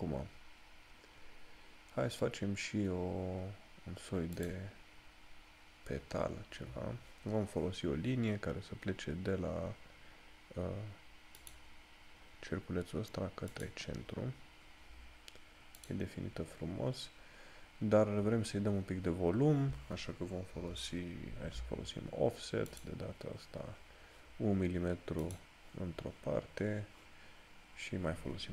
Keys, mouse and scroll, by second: 4.5 click, 11.5 click, 16.3 click.